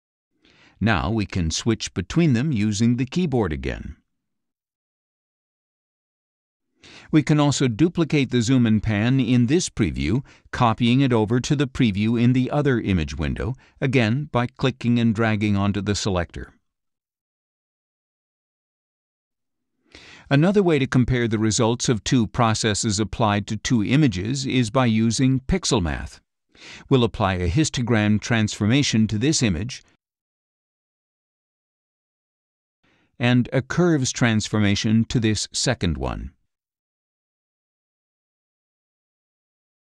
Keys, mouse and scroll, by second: 3.3 ctrl+Right, 3.9 ctrl+Left, 4.7 ctrl+Right, 5.3 ctrl+Left, 6.0 ctrl+Right, 6.6 ctrl+Left, 9.1 click, 10.7 click, 12.6 click, 15.2-17.7 drag, 21.7 click, 23.7-25.0 drag, 25.5-26.6 drag, 27.8-29.6 drag, 31.4 click, 35.0 click, 37.0-38.4 drag.